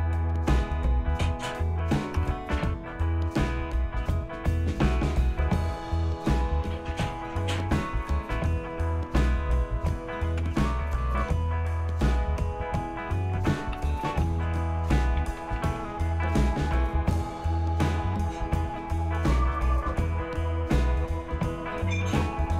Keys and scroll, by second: 2.2 Return, 5.7 Tab, 6.9 Tab, 7.6 Return, 8.9 Tab, 9.4 Tab, 10.4 Return, 13.0-16.3 typing, 16.8 Return, 20.1 Return, 21.5-22.5 typing.